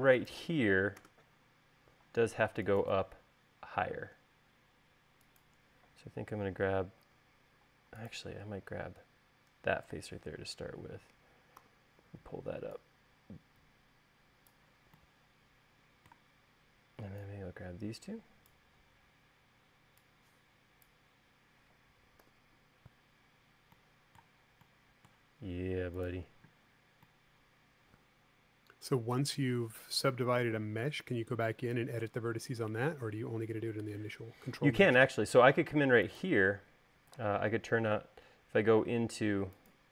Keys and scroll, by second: 1.8 space, 12.4 v, 23.1 u, 39.8 space.